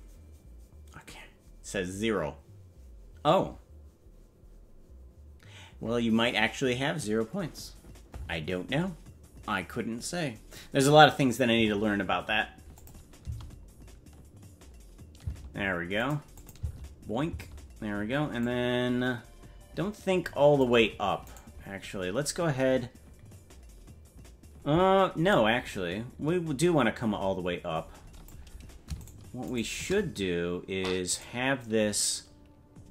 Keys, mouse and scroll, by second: 12.8 click, 13.3 space, 15.5 space, 16.0 click, 16.4 click, 16.6 space, 18.4-20.7 drag, 18.4 space, 21.4 right click, 25.3-28.4 drag, 29.1 shift+right click, 31.1 right click.